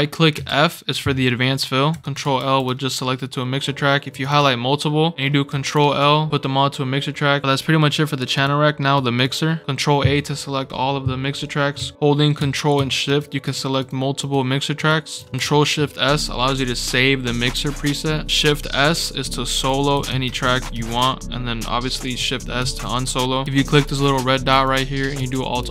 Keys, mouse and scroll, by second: 0.3 f, 1.9 Escape, 2.0 click, 2.4 ctrl+l, 3.1 scroll down 2, 3.3-3.9 scroll up 4, 4.1 click, 4.3 click, 5.5 ctrl+l, 8.3 click, 8.9 click, 11.9 ctrl+d, 13.0 ctrl+shift+click, 13.4 ctrl+shift+click, 13.7 ctrl+shift+click, 14.1 ctrl+shift+click, 14.7 ctrl+shift+click, 19.6 click, 20.0 shift+s, 20.3 click, 20.6 shift+s, 22.5 shift+s, 24.5 click, 25.0 scroll up 2, 25.3 alt+r.